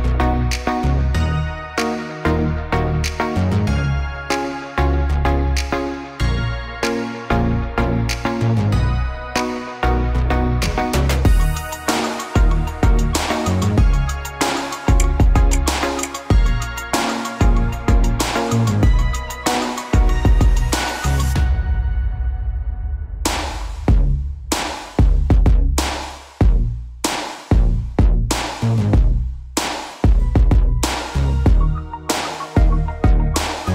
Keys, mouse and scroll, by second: 2.4-4.4 drag, 3.1-4.0 middle drag, 4.0-6.1 middle drag, 6.4 ctrl+r, 10.7 click, 11.3 Tab, 12.5-16.6 middle drag, 17.1-22.9 drag, 27.0-29.5 drag, 31.9 click.